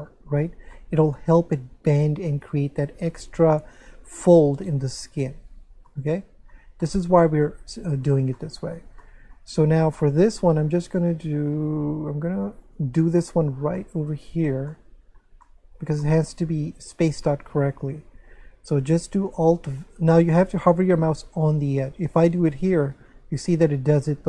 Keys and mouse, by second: 0.7 shift+middle click, 5.9 middle click, 9.0 shift+middle click, 12.6 right click, 13.2 shift+middle click, 14.7 shift+middle click, 16.0 shift+middle click, 17.3 shift+middle click, 23.0 alt+v, 23.9 right click.